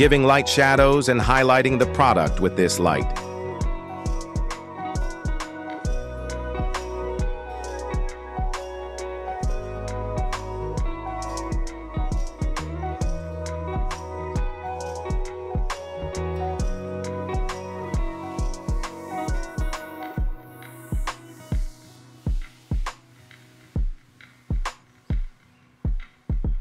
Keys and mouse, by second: 1.2 y, 1.3 y, 1.3 y, 2.0 r, 3.4 z, 3.5 z, 3.6 z, 5.6 click, 8.0 click, 10.4 s, 14.0 shift+middle click, 14.5 s, 15.9 z, 16.0 z, 16.2 middle click, 16.9 shift+middle drag, 17.3-17.8 middle drag, 18.4 shift+middle click, 18.8 g, 21.8-23.8 drag, 25.1 middle drag, 25.9 shift+middle drag.